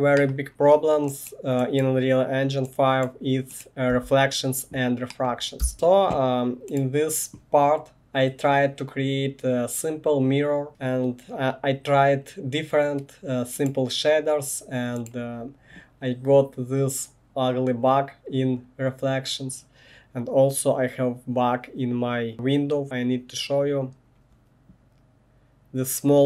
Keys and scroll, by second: 3.9 1, 5.6 space.